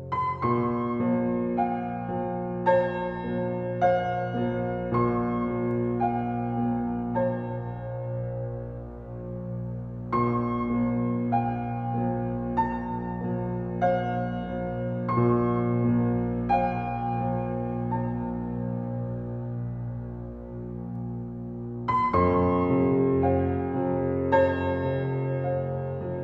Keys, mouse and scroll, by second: 0.1-0.8 scroll up 1, 1.4 scroll down 1, 3.0 scroll up 1, 4.2 click, 4.9-5.5 scroll down 1, 5.5-5.8 scroll up 1, 5.8-7.7 scroll down 1, 9.1 shift+click, 9.1 typing, 11.8 space, 13.9 scroll down 1, 16.7 click, 18.0 scroll up 1, 20.6 alt+shift+click, 24.4-24.8 scroll down 1, 25.1 scroll up 1, 25.5-26.2 scroll down 1.